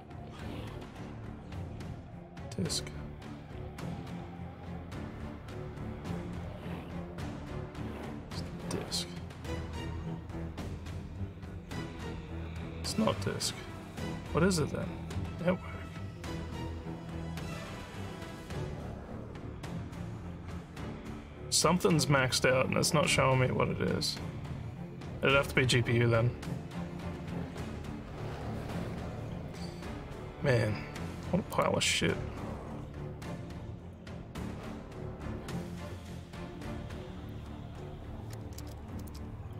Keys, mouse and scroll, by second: 39.1-39.5 alt+drag.